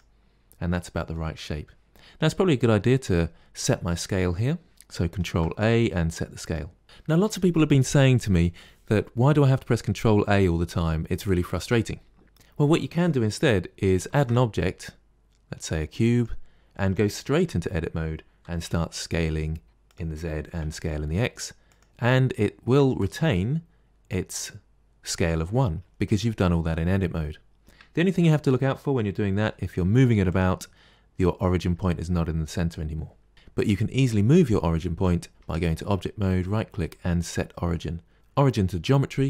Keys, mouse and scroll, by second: 0.1 scroll down 4, 0.6 middle click, 1.2-1.7 scroll down 2, 5.1 ctrl+a, 14.0 shift+a, 17.3 Tab, 18.3 s, 20.2 s, 22.6 Tab, 27.9 Tab, 29.3 g, 35.3 Tab, 36.1-38.1 right drag.